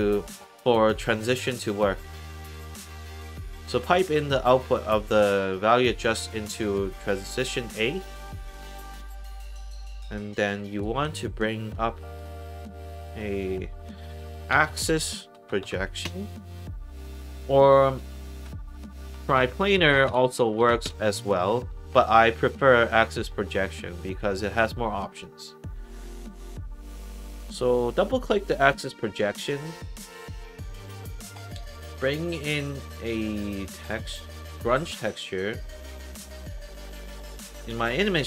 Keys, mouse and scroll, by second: 1.0 click, 1.8 middle click, 2.8-4.9 drag, 7.7 click, 9.6 click, 10.2 middle click, 10.6 click, 10.9 Tab, 12.1 click, 12.4 middle click, 12.8 click, 13.0 Tab, 13.8-15.2 typing, 15.4 Down, 16.0 Return, 17.2 click, 17.9 click, 18.3 Tab, 18.7-20.0 typing, 20.5 Down, 20.8 Return, 22.2 click, 23.2 click, 24.1 middle click, 24.8 click, 27.0 click, 27.2 click, 28.9-29.3 scroll down 3, 33.9 click, 37.2-37.5 scroll down 2, 37.6-38.2 scroll up 2.